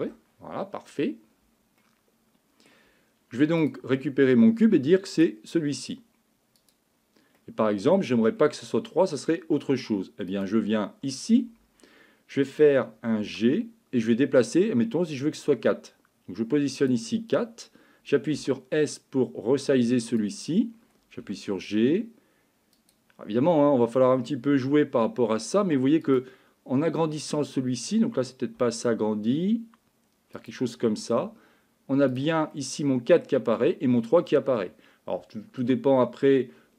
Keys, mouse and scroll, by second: 1.8 middle click, 3.6 click, 7.4 middle click, 13.2 g, 18.3 s, 21.2 g, 24.6 g, 27.0 click, 28.6 s, 31.1 g, 32.5 middle click, 34.3-35.6 middle drag.